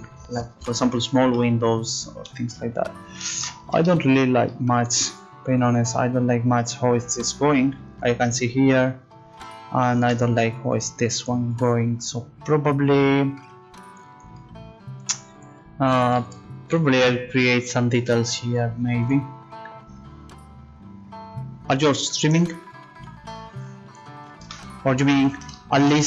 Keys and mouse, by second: 16.9 Tab.